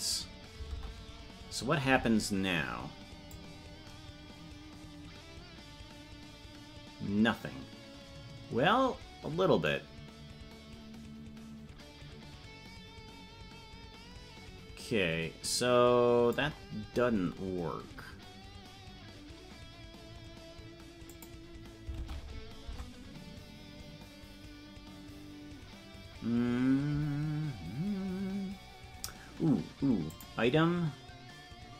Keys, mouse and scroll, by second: 3.3-16.4 drag, 21.0 click, 21.9 ctrl+Tab, 22.6 Tab, 30.0 click.